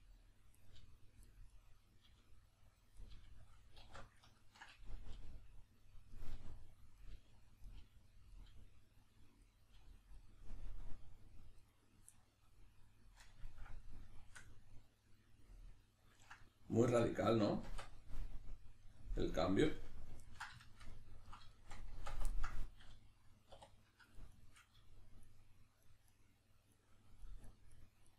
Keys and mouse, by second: 0.2 click, 0.5 right click, 0.8 g, 1.5 right click, 2.1 g, 2.8 click, 3.0 right click, 3.1 g, 3.5 click, 3.8 alt+q, 4.4-5.9 ctrl+middle drag, 5.1 g, 5.9 click, 6.1 right click, 6.3 g, 6.8 click, 7.0 right click, 7.1 g, 7.5 click, 7.7 right click, 7.8 g, 8.1 click, 8.3 right click, 8.5 g, 9.0 click, 9.5 right click, 9.7 g, 10.2 click, 11.6 right click, 12.1-19.7 middle drag, 17.7 Tab, 20.6-21.3 shift+middle drag, 21.9 Tab, 22.3 ctrl+middle click, 23.5 2, 24.1 right click, 24.3 shift+right click, 25.2 shift+right click, 25.8 shift+right click, 26.0 shift+right click, 26.7 shift+right click, 27.2 shift+right click, 27.4 shift+right click, 27.7 shift+right click, 28.0 shift+right click.